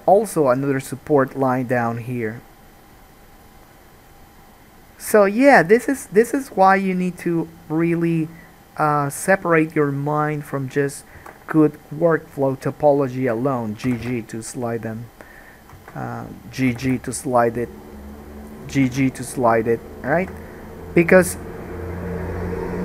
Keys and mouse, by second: 1.5 k, 11.4 1, 12.0 click, 12.5 shift+middle click, 12.6 shift+click, 12.7 shift+middle click, 14.0 g, 15.9 alt+a, 16.3 click, 16.9 g, 18.7 click, 19.0 g, 19.1-22.8 middle drag, 20.4 alt+a.